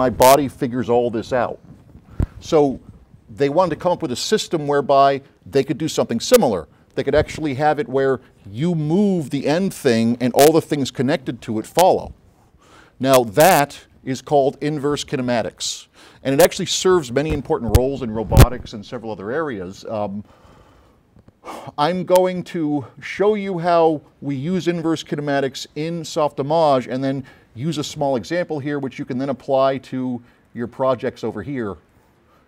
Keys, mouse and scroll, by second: 30.6 click, 32.0 click.